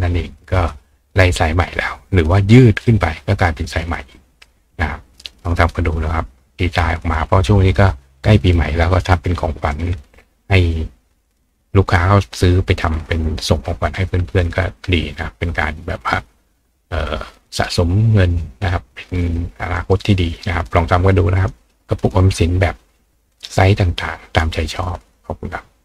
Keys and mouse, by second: 5.9 click, 19.2 click, 20.7 click.